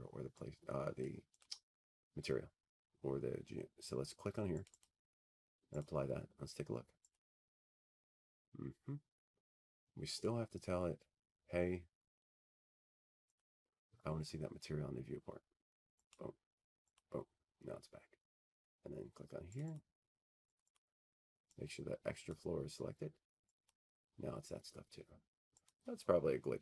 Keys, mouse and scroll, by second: 1.3 click, 6.6 click, 7.2 click, 10.3 click, 10.5 click, 11.3 click, 12.8 click, 15.9 click, 19.3-21.1 drag, 21.7 click, 25.2 click, 25.5 click, 26.2 click, 26.4 click.